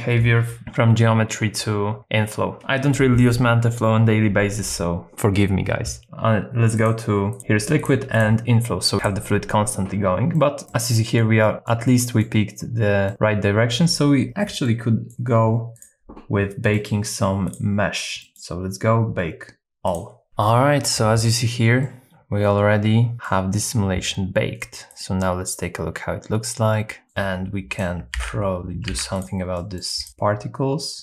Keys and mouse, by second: 6.9 click, 7.9 click, 9.0 click, 10.4 middle click, 10.7 middle click, 11.4 middle click, 12.0 middle click, 13.1-15.1 middle drag, 15.7 click, 16.8 middle click, 17.6 click, 18.3 middle click, 19.9 click, 21.8-23.3 middle drag, 25.0-27.0 drag, 27.0 middle click, 28.1 alt+x, 28.9 alt+x, 29.1 click, 29.6 middle click.